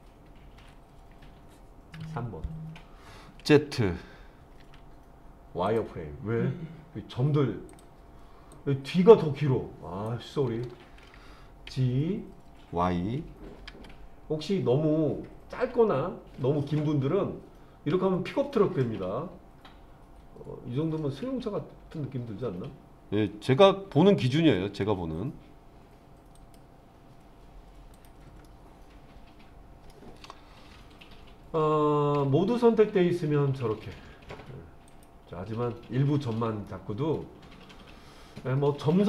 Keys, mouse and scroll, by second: 0.6 KP_1, 2.0 KP_3, 4.6 z, 7.7 click, 8.5-10.1 drag, 11.7 g, 13.7 y, 26.4 click, 27.9 click, 28.4-29.9 middle drag, 32.1 a, 34.9 click, 36.7-39.0 middle drag.